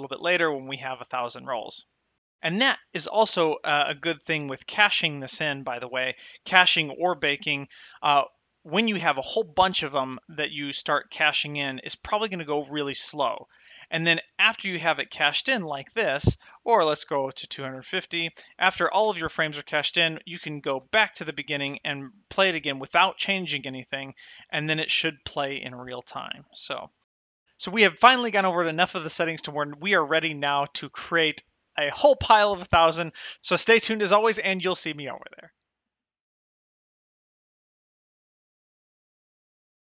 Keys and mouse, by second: 16.8 space, 19.3 space, 21.0 shift+click, 21.8 space, 25.0 space.